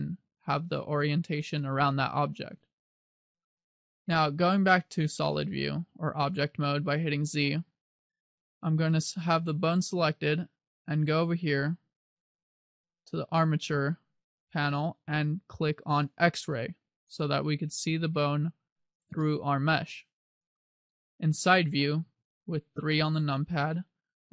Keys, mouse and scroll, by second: 6.3 z, 7.2-7.9 scroll down 4, 8.5-10.0 scroll down 1, 12.2 click, 17.1 click, 19.3 middle click, 22.3 KP_3.